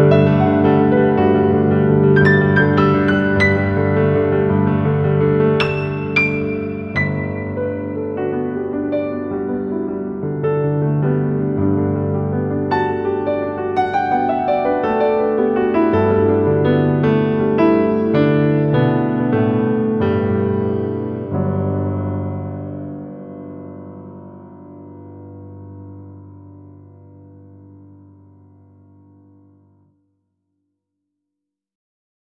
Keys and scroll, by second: 2.0 Escape, 7.3 F2, 10.5 F3, 13.2 ctrl+g, 13.6 F2, 18.2 ctrl+g, 19.7 ctrl+g, 20.3 c, 20.7 Escape, 20.8 F2, 23.6 F3, 24.6 Escape, 25.9 shift+Page_Up, 26.3 Escape, 29.1 shift+F2, 29.9 F9, 31.9 F3.